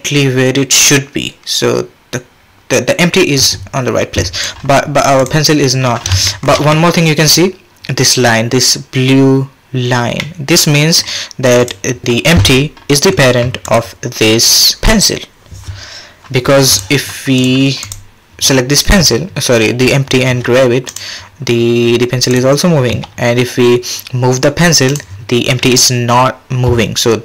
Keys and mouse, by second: 6.3 shift+click, 6.7-7.3 drag, 10.2-10.7 middle drag, 16.7 click, 20.3 g, 22.3 click, 22.9 g.